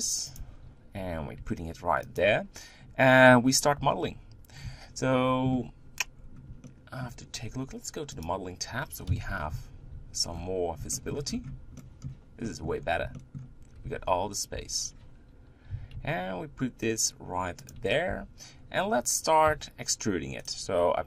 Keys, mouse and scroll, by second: 0.4 Tab, 0.8 g, 6.1-6.6 scroll up 3, 6.6-8.1 shift+middle drag, 8.1 click, 9.1 KP_1, 10.0 z, 10.3-10.9 scroll down 7, 10.9 shift+middle click, 11.3-11.8 scroll up 6, 11.8-12.8 shift+middle drag, 12.8-13.1 scroll up 1, 13.1 shift+middle click, 13.9 Tab, 14.5 Tab, 14.8-15.7 scroll up 2, 15.7 g, 18.1 Tab, 18.5-19.5 scroll up 2, 19.5 e.